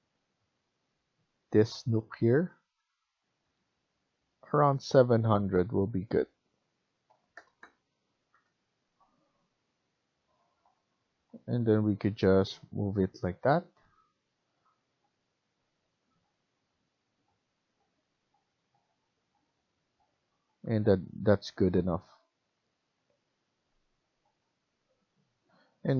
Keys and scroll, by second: 2.5 Escape, 2.8 Escape, 3.3 F1, 6.8-7.7 typing, 8.2 Return, 19.5 Escape, 21.1 Escape, 25.3 F1.